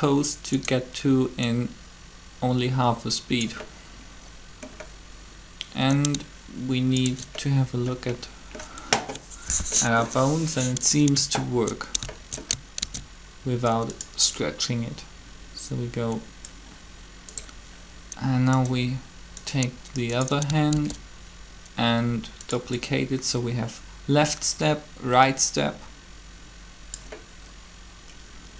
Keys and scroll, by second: 12.8 alt+shift+d, 20.7 shift+d.